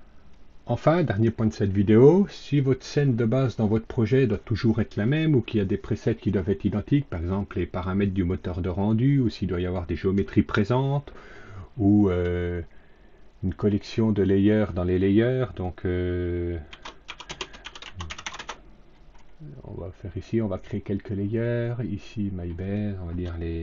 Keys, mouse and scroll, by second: 13.4 click, 16.6-18.7 typing, 20.4 click.